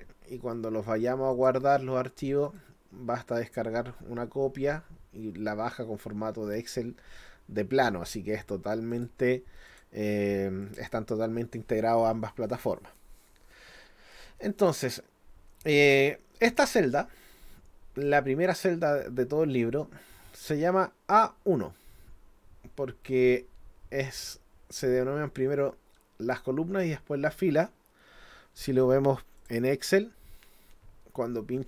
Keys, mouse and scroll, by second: 1.3 click, 2.5 click, 8.9 click, 9.7 click, 10.6 click, 16.6 click, 29.4 click.